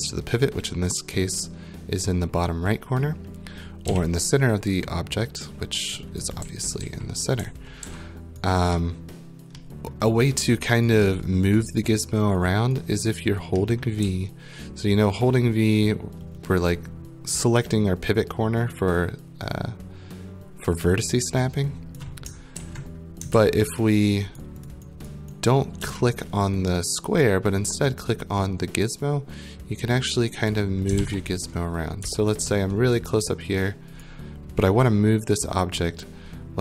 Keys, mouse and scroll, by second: 0.0 right click, 3.9 z, 6.2 right click, 6.4-7.8 typing, 8.4 right click, 9.3 middle click, 9.9 middle click, 10.8 right click, 13.1 right click, 13.8 middle click, 14.0-22.0 typing, 22.0 click, 22.6 ctrl+z, 23.3 ctrl+z, 24.4 right click, 24.7 click, 25.1 right click, 25.5 right click, 25.7-30.4 typing, 30.4 click, 31.0 ctrl+z, 32.0-32.9 typing, 34.0 right click.